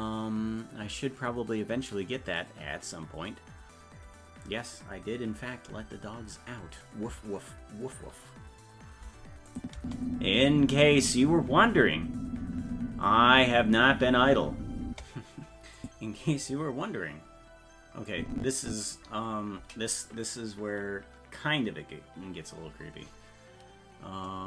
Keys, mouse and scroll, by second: 9.5 click, 9.8 space, 14.9 space, 15.8 click, 18.1 click.